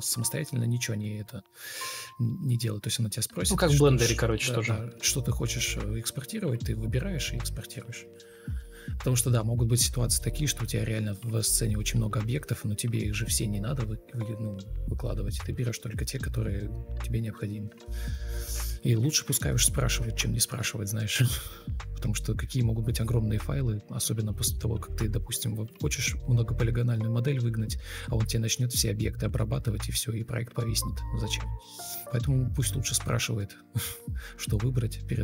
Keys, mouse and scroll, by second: 0.8 ctrl+click, 4.5 Escape, 9.7-10.6 typing, 10.7 Escape, 12.5 ctrl+click, 15.3 ctrl+e, 15.4 ctrl+space, 16.3 ctrl+space, 16.8 ctrl+d, 18.0 ctrl+e, 18.0 ctrl+space, 18.9 ctrl+space, 19.6 ctrl+u, 20.0 Escape, 24.1 Down, 28.5 shift+click, 29.1 shift+click, 30.4 ctrl+z, 30.7 ctrl+z, 31.6 ctrl+l, 33.3 typing, 33.4 Return, 34.4 ctrl+click, 34.4-35.2 typing.